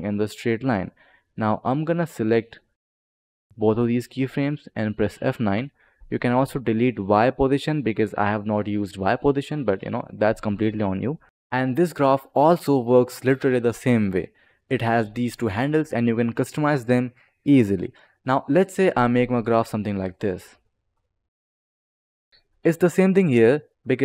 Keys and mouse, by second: 0.3 click, 1.4 click, 2.2 click, 5.3 F9, 5.8 click, 6.9 click, 9.1 click, 9.8 click, 10.7 click, 11.2 click, 14.6 click, 17.3 click, 18.3 click, 20.8 click.